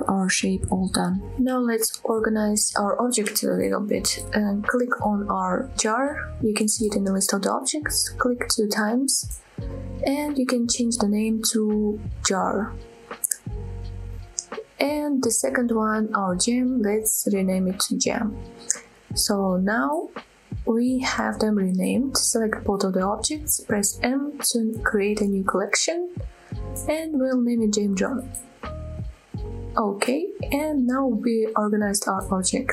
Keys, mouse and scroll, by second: 0.1 click, 0.4 click, 0.5 click, 0.6 middle drag, 0.9-1.4 scroll down 2, 1.0-1.4 middle drag, 1.5 scroll down 2, 1.8 middle click, 2.2-3.2 middle drag, 5.6 click, 5.9 click, 8.6-15.9 drag, 16.3 click, 16.5-19.3 drag, 21.2 shift+click, 21.7-22.2 middle drag, 22.7 m, 31.4 scroll up 2, 31.7 click.